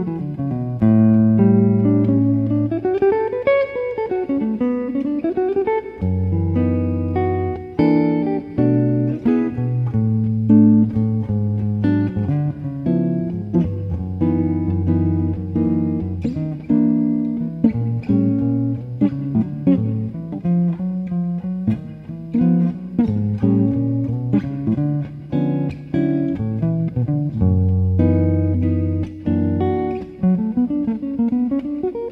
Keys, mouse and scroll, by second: 1.8 u, 2.5 right click, 4.0-5.9 middle drag, 5.6 a, 8.1 middle click, 8.9-10.5 middle drag, 9.7-12.4 right drag, 11.6 u, 15.3 middle click, 16.2 middle click, 16.9-17.9 middle drag, 17.9-21.3 right drag, 21.1 u, 24.0 middle click, 24.6-25.9 middle drag, 25.3 right click, 25.9-28.9 right drag, 27.9 u, 28.9-31.5 middle drag, 31.5 right click, 31.5 middle click.